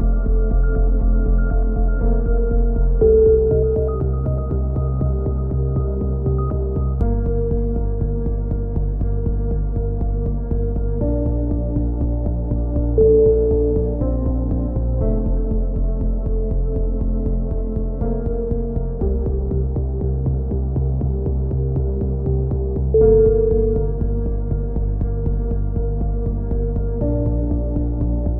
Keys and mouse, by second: 0.9 a, 2.1 ctrl+z, 2.4 e, 2.8-4.3 drag, 4.3 e, 4.5 click, 5.1-6.1 drag, 6.5 click, 7.2 e, 7.5 click, 8.2-9.8 drag, 10.0 right click, 10.4 click, 11.2 a, 11.8 click, 11.8 KP_3, 12.4 b, 12.9 click, 14.5 c, 15.0 right click, 15.1 click, 16.0 c, 16.3 right click, 16.6-18.0 drag, 18.2 click, 18.9 a, 19.0 z, 19.2 z, 19.3 c, 19.5 right click, 19.6 click, 20.3 click, 21.0 a, 21.0 z, 21.2 click, 21.9 click, 21.9 KP_7, 22.1 z, 22.5-23.5 right drag, 22.9-23.9 drag, 23.9 a, 24.7 click, 24.8 right click, 25.2 f, 25.3 a, 25.4 z, 25.5-26.5 drag, 26.5 right click, 27.2 KP_7, 27.4 z, 27.9 KP_3.